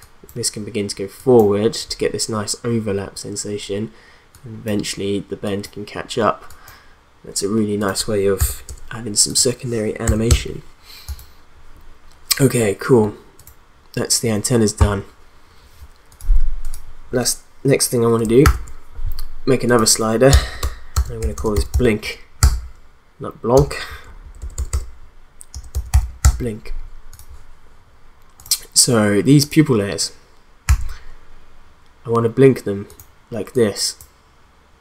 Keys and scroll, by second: 8.4 0, 8.7 Return, 10.0 0, 10.3 Return, 18.4 ctrl+d, 20.3 Return, 20.7-22.2 typing, 22.4 Return, 23.9 Right, 24.2 BackSpace, 25.5-26.4 typing, 30.7 s.